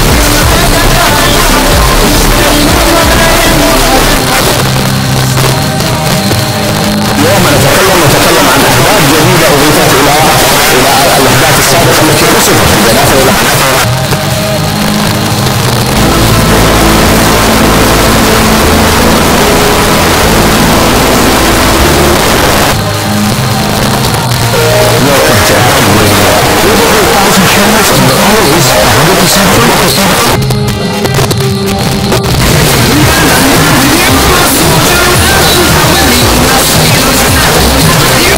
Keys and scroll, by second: 4.2 Page_Down, 13.3 Page_Down, 22.1 Page_Down, 38.3 space.